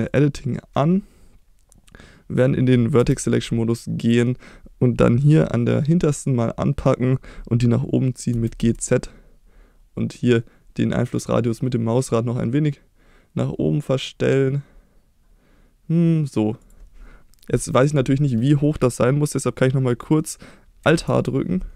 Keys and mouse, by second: 0.1 click, 3.0 1, 4.0 click, 8.3 g, 8.6 z, 16.6 click, 21.0 alt+h.